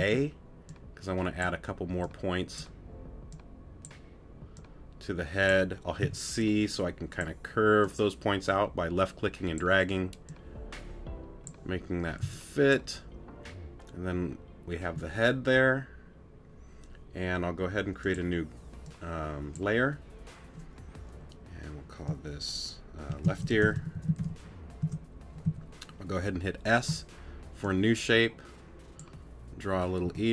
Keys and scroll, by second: 0.0 a, 6.0 c, 12.2 c, 30.0 t.